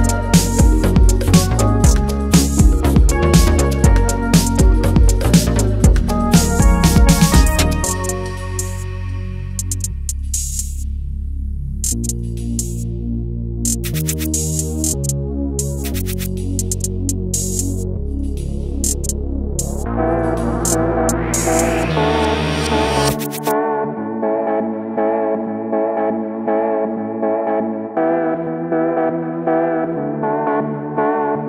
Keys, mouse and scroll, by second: 0.1 ctrl+a, 1.3-5.9 drag, 5.6-7.1 typing, 10.1-26.2 drag, 31.2 ctrl+z.